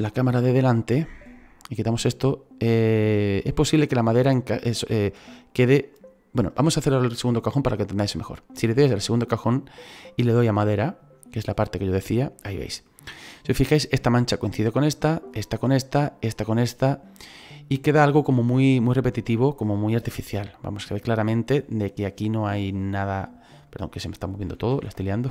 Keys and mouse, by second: 0.3 KP_1, 1.6 right click, 8.6 right click, 10.0 click, 12.1 right click, 22.1 right click, 23.6 click, 24.7 ctrl+z.